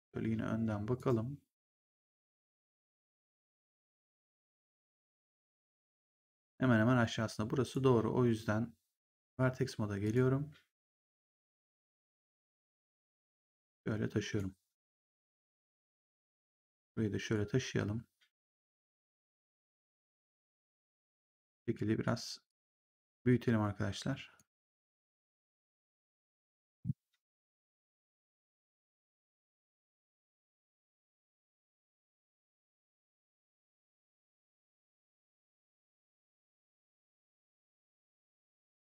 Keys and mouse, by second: 0.9 right click, 2.3 click, 4.6 middle click, 7.5 click, 9.9 click, 10.8 right click, 11.3 click, 12.0 w, 12.9 click, 15.6 click, 17.2 click, 19.8 click, 21.1 click, 22.4 click, 27.4 click, 28.9 click, 31.5 click, 33.4 click, 35.4 click.